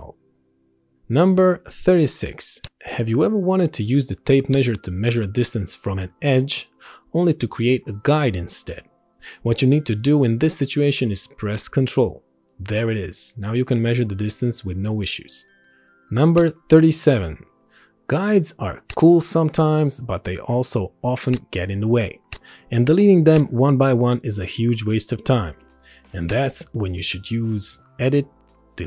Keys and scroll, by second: 16.0 Right, 19.7 ctrl+1, 20.8 ctrl+e.